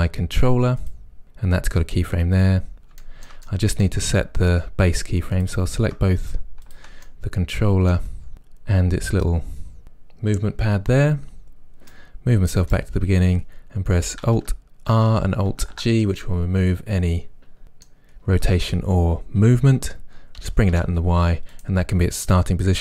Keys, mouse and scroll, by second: 0.8 click, 3.0-5.4 shift+middle drag, 4.1-5.4 scroll up 2, 5.4 shift+click, 6.7 shift+click, 7.1-8.3 middle drag, 12.0-16.2 right drag, 14.9 alt+r, 15.5 alt+g, 16.2-21.6 middle drag, 20.5 g, 21.6 click.